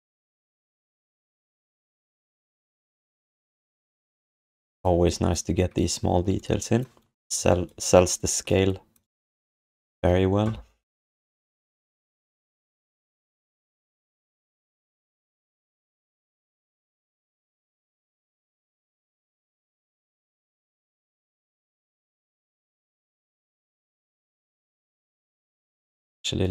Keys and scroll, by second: 25.0 alt+q.